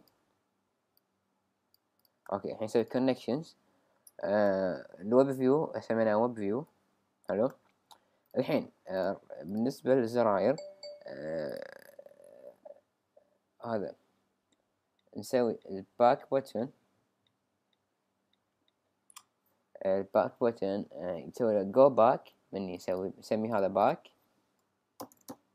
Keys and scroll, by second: 24.8-25.5 typing.